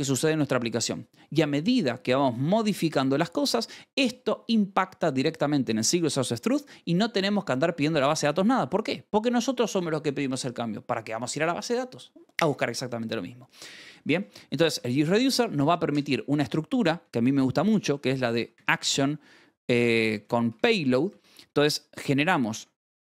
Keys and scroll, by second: 1.6 v, 3.4 Escape, 14.1 Escape, 14.2 k, 14.7 shift+v, 16.2 o, 17.3-21.1 typing, 21.1 Escape, 22.1 h, 22.6 Escape.